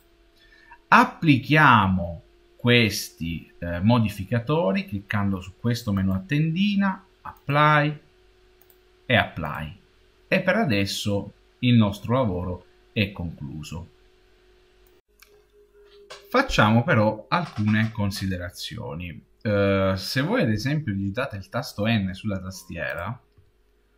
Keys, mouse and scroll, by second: 0.0-1.6 drag, 5.8 click, 8.5 click, 23.2 n.